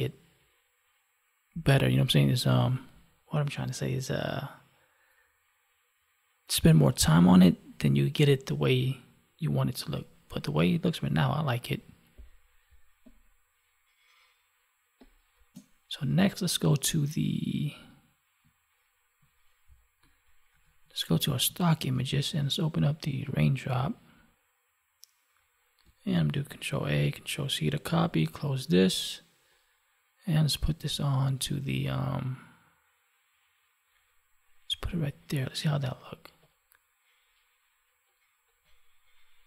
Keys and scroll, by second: 12.6 space, 20.8 alt+Tab, 26.3 ctrl+a, 27.8 ctrl+w.